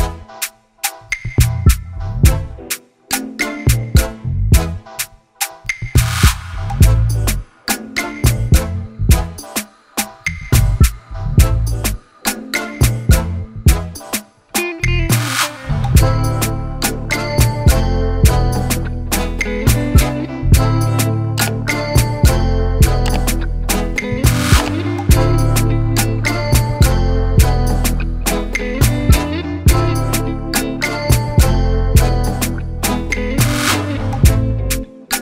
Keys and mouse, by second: 0.9-3.5 drag, 4.0 Return, 4.9 click, 8.2 click, 9.5 click, 13.0 click, 13.8 click, 15.5 click, 16.9 click, 17.9 click, 20.4 click, 21.2 ctrl+t, 22.6 click, 25.5 click, 27.3 Return, 28.0-29.5 drag, 29.8 alt+click, 31.0 Delete, 31.7 click, 32.3 click, 34.6 click.